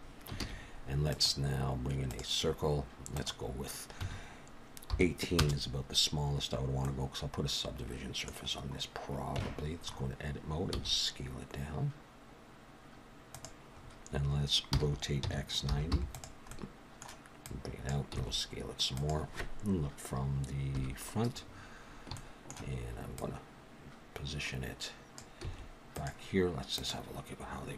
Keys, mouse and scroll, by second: 0.4 shift+a, 3.1 click, 6.8 middle click, 8.3-8.8 scroll down 6, 9.4 Tab, 9.8-10.8 scroll up 4, 10.8 s, 13.8-14.7 scroll up 3, 14.7 r, 16.5 middle click, 17.4 click, 18.1 s, 20.7 KP_1, 21.5-22.1 scroll up 2, 22.1 scroll up 2, 22.1 shift+middle click, 23.2 click, 25.4 s.